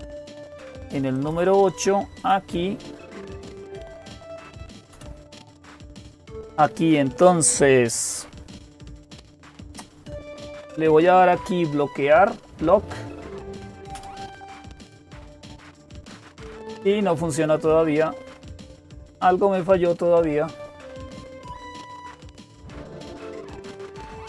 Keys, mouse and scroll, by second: 1.0-2.1 drag.